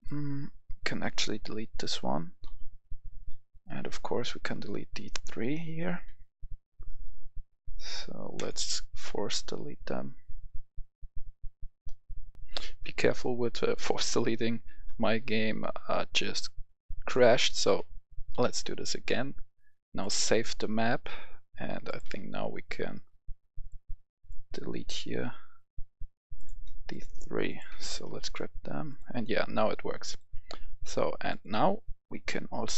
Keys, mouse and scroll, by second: 2.4 Delete, 4.4 shift+click, 5.9 shift+Delete, 8.2-12.3 drag, 12.3 F10, 14.9 right click, 15.4-17.0 typing, 16.0 right click, 16.9 right click, 17.0 right click, 17.6 click, 18.3 Delete, 20.0-21.0 drag, 22.0 click, 23.6 click, 26.3 click, 27.4 shift+click, 28.8 click.